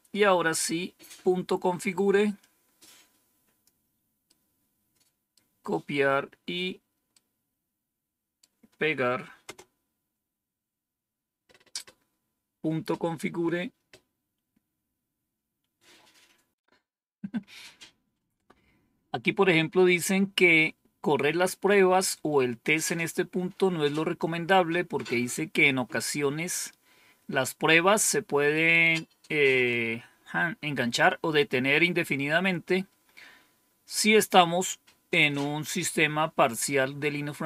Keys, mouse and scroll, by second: 2.3-3.5 drag, 4.1-5.2 right drag, 7.0-8.3 right drag, 9.3 Return.